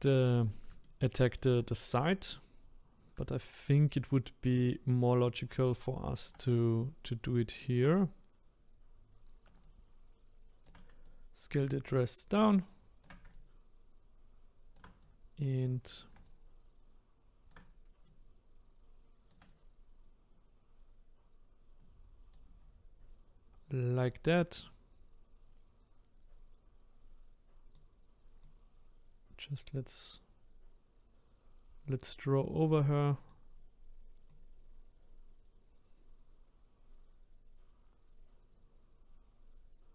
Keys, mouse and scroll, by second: 0.2 click, 0.8-6.3 shift+middle drag, 8.2-8.5 scroll up 2, 9.6-22.6 shift+right drag, 24.0-27.1 drag, 28.4-31.4 drag, 34.3-37.3 drag.